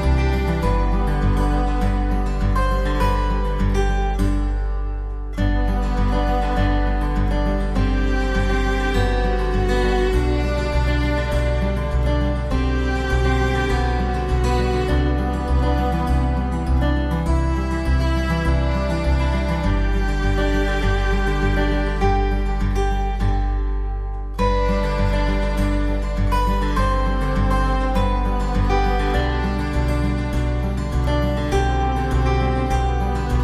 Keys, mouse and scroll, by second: 0.9 alt+middle click, 4.8 alt+w, 5.8 middle click, 13.5 alt+w, 14.1 alt+middle click, 21.3 alt+middle click, 24.2 alt+middle click, 24.2 alt+middle click.